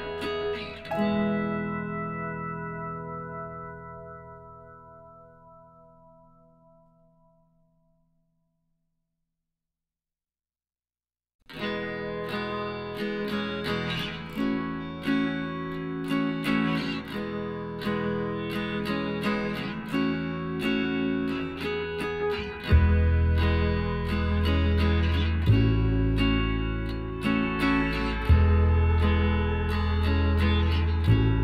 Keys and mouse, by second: 1.2-4.5 right drag, 3.8 s, 9.0-10.9 right drag, 9.8 a, 10.5-11.8 middle drag, 12.9-14.6 drag, 14.3-18.2 right drag, 17.5 s, 19.4-21.7 right drag, 20.9 s, 24.2-27.3 middle drag, 26.4-28.5 right drag, 27.7 s, 29.7-31.4 right drag.